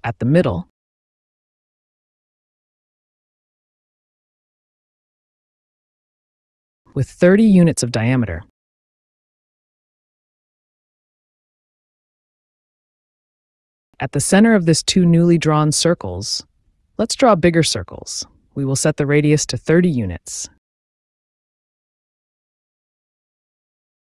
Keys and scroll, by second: 0.0 Return, 2.3 d, 3.3 space, 6.6 KP_3, 6.7 KP_0, 9.2 Return, 11.3 c, 11.8 space, 17.8 KP_3, 18.0 KP_0, 18.6 Return, 19.4 space, 23.2 KP_3, 23.2 KP_0.